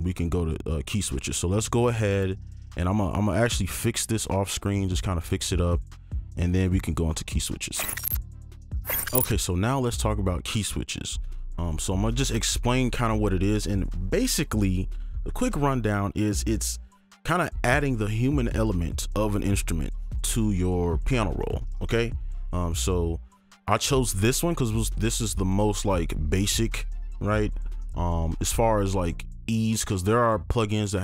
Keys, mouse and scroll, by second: 3.2-5.3 scroll up 1, 6.0-6.4 scroll down 1.